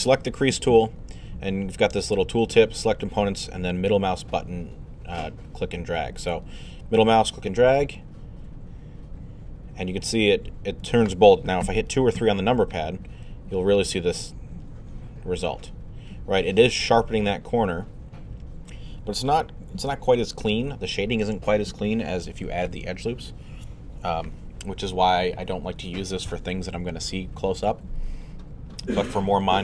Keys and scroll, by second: 11.6 2, 12.2 3.